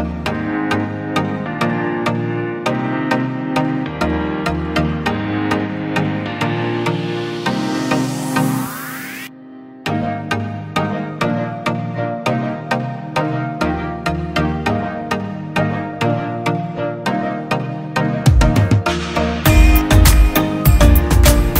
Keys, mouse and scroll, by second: 4.1-6.8 scroll down 1, 6.8 scroll down 1, 7.4 alt+click, 9.8-10.7 [, 10.9 [, 11.1 [, 14.2 double click.